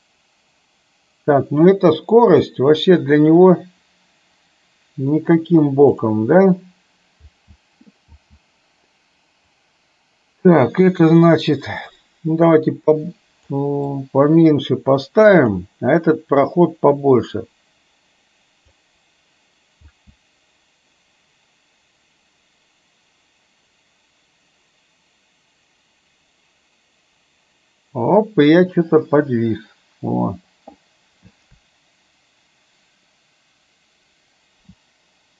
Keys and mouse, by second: 6.1 click, 7.3 space, 8.2 space, 9.8-13.5 drag, 14.0-15.6 drag, 16.7-18.9 drag, 19.9 space.